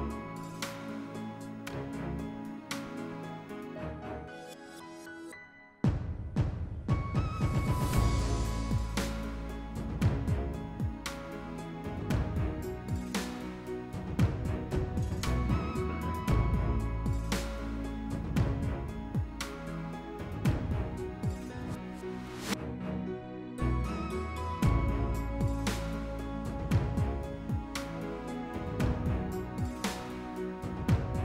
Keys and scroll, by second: 6.2 s, 7.2 s, 23.4 s, 29.2 s, 29.8 s.